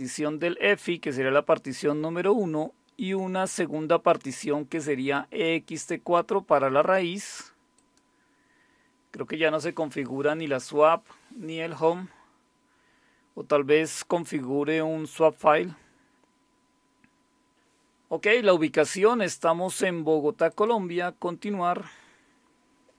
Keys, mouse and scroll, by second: 7.8 click, 20.5 click.